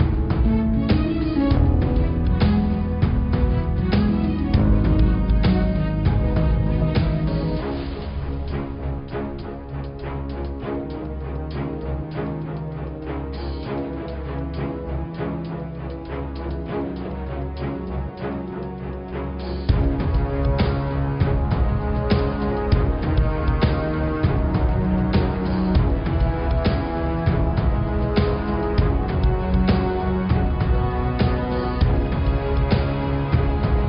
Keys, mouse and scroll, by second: 0.5 click, 0.9-2.6 middle drag, 2.6 s, 6.7 click, 7.0-8.9 middle drag, 8.9 click, 10.0 g, 12.0 click, 12.8-13.9 scroll up 5, 15.4 middle click, 15.9-16.2 scroll down 1, 16.2-18.1 middle drag, 18.1 click, 21.5 ctrl+r, 22.1 click, 23.9 ctrl+r, 27.2 Tab, 27.7 Tab, 30.0 click, 31.3 click, 32.1 click, 33.0 click, 33.6 click.